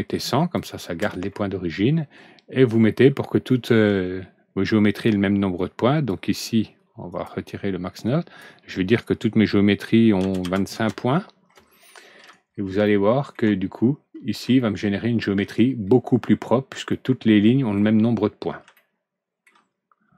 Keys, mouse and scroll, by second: 5.5 click, 7.0 click, 8.0 click, 10.1 KP_2, 10.3 KP_5, 10.7 KP_Enter, 11.8 middle click, 12.7 alt+Right, 12.8 middle click, 13.7-14.3 scroll up 2, 14.5 middle click, 15.8-16.5 scroll down 2, 16.7 alt+Right, 16.8 middle click, 18.1 scroll down 1, 18.7 middle click, 19.7-20.1 scroll up 2.